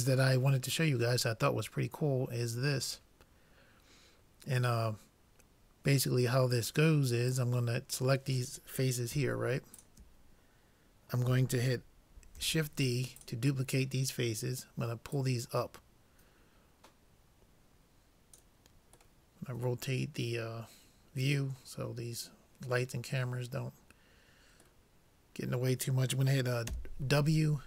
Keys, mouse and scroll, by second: 7.4-11.6 drag, 12.4 shift+d, 15.2-17.0 drag, 19.2-21.3 middle drag, 24.9-26.7 middle drag, 26.8 w.